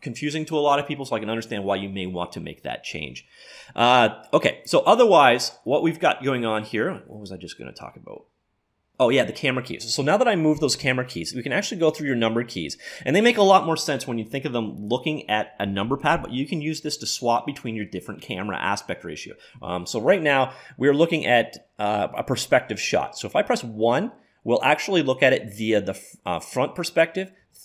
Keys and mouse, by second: 23.5 KP_1, 27.4 KP_3.